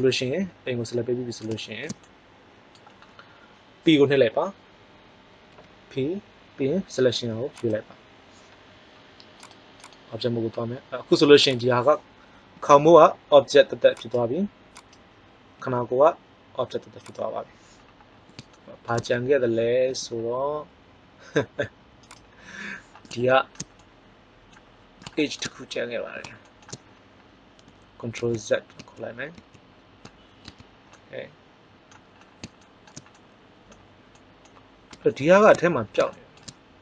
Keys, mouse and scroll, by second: 5.4 p, 11.2 right click, 12.5 g, 14.2-15.0 right drag, 15.6 g, 17.1-18.6 right drag, 19.8 g, 28.2 ctrl+z, 28.7 ctrl+z, 29.3 ctrl+z, 30.4 Tab, 30.9 middle click.